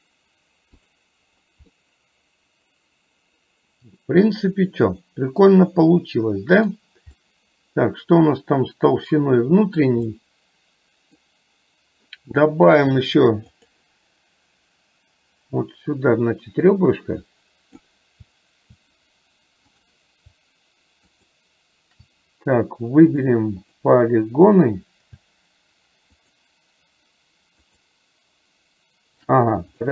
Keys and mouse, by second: 1.8-6.8 middle drag, 7.2-9.9 middle drag, 10.2-11.2 middle drag, 15.8-17.9 drag, 19.8 click, 21.1 shift+click, 23.2 click, 23.7 click, 26.3 click, 27.7 click.